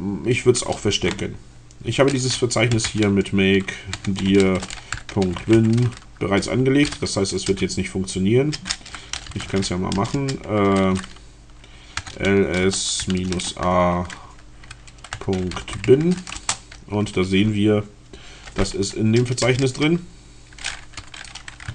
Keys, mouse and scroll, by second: 2.4-6.1 typing, 7.6 BackSpace, 8.9-9.9 typing, 12.0-13.7 typing, 15.3-16.3 typing, 16.4 Return, 18.3 Up, 19.4 BackSpace, 20.5 b.